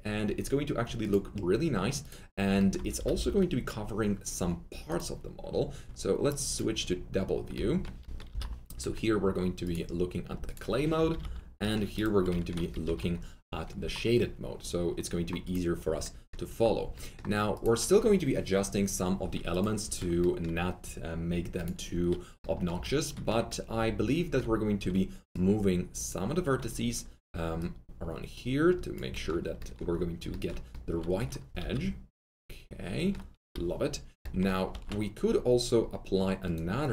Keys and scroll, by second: 2.9 typing, 8.2 alt+F3, 10.9 F3, 11.0 F3, 11.2 F4, 12.8 alt+F3, 24.7 alt+1, 31.6 alt+F3, 33.4 alt+F3, 34.7 alt+1.